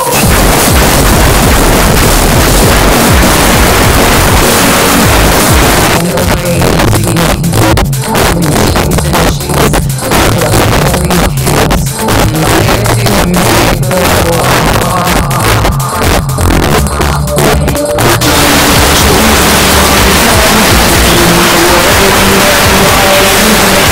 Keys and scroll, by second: 5.8 Page_Down, 23.8 space.